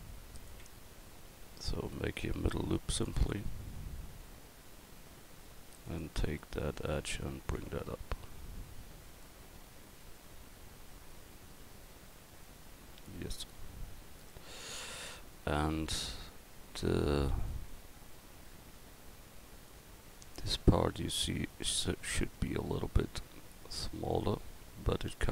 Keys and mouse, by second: 0.4 right click, 0.6 Tab, 2.4 ctrl+r, 6.8 right click, 13.1-14.7 drag, 19.6-20.7 middle drag.